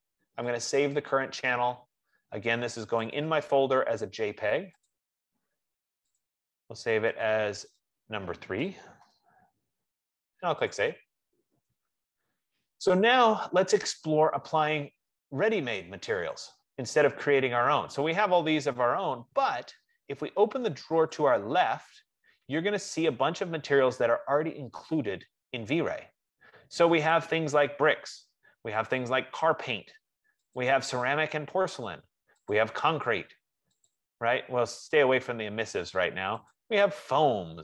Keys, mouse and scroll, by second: 0.9 click, 3.5 click, 5.3 click, 6.7 click, 7.6 click, 8.0 click, 8.9 BackSpace, 9.3 3, 11.1 click, 17.1 click, 17.5 F15, 21.5 click, 27.8 click, 29.2 click, 30.9 click, 32.9 click, 34.4 click, 36.9 click.